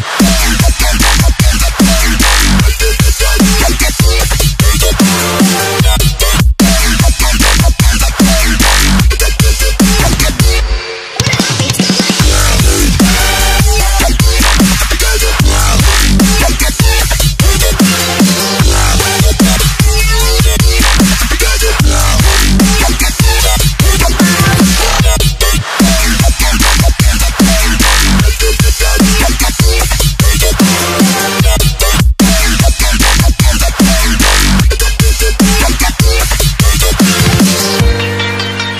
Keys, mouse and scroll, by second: 2.6 alt+Tab, 3.3 alt+click, 4.3 ctrl+c, 4.5 alt+Tab, 5.0 v, 6.0 click, 9.3 click, 13.8 click, 22.2 ctrl+s, 25.8 ctrl+Num_Lock, 26.4 ctrl+shift+s, 28.0 click, 33.4 ctrl+z, 34.6 scroll up 1, 36.5 click, 37.0 right click, 38.0 click.